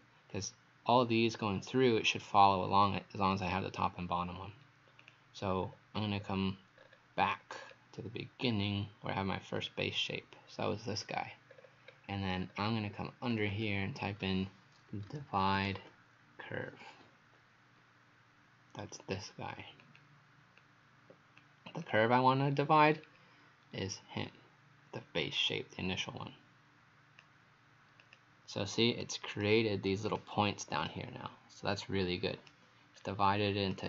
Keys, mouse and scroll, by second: 5.0 click, 5.5-6.8 scroll down 4, 6.8-7.3 scroll up 3, 7.6-8.4 scroll down 2, 8.4 scroll up 5, 9.6 click, 11.5-12.1 scroll down 4, 12.4-13.3 scroll up 3, 13.3 click, 13.6 click, 14.7-16.3 typing, 19.8 click, 22.9-23.2 scroll down 2, 23.8-25.1 scroll up 1, 25.4 click, 29.1 right click, 30.1 click, 30.9 right click, 33.0 scroll up 2, 33.7 right click, 33.7-33.8 scroll up 1.